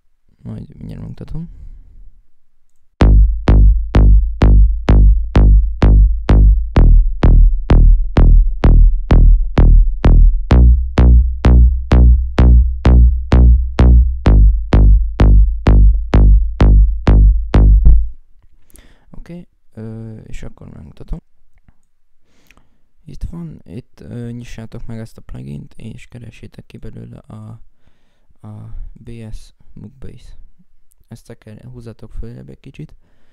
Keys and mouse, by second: 13.2 right click, 19.2 F1, 20.6 F1.